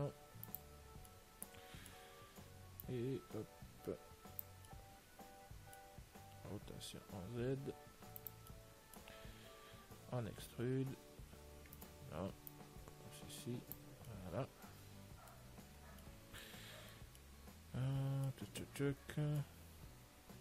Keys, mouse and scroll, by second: 1.4-3.1 middle drag, 3.1 click, 5.0-8.5 middle drag, 6.8 r, 9.0-10.8 middle drag, 9.7 Tab, 10.8 e, 12.8 click, 14.4-19.2 middle drag, 19.4 Tab, 19.7-20.4 middle drag.